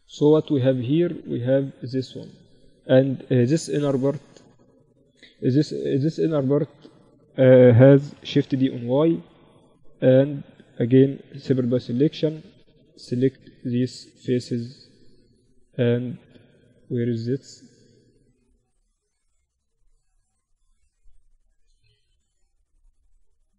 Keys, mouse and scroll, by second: 5.4 KP_7, 6.1 middle click, 7.5 shift+d, 10.7 p, 11.5 Tab, 11.8-16.0 middle drag, 12.4 z, 16.0 z, 16.0-20.7 middle drag, 17.8 z, 18.7 Tab, 21.8-22.8 middle drag, 22.8-23.5 right drag.